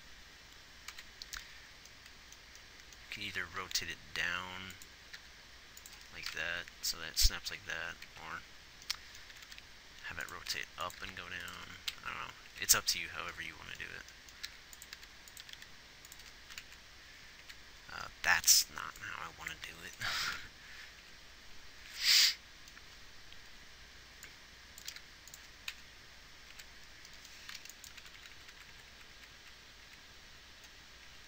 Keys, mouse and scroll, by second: 1.2 Right, 4.0 r, 5.5 g, 6.7 Left, 7.4 Right, 7.9 Left, 8.4 Right, 9.7 r, 10.8 r, 11.4 g, 12.3 Left, 12.9 Right, 14.8 g, 15.3 r, 15.7 r, 17.0 Left, 17.7 Right, 20.1 g, 20.7 Left, 21.4 Right, 25.2 g, 26.0 Left, 26.8 Right, 28.3-28.7 Left, 29.1-29.4 Right, 29.7 Right, 30.2 Right.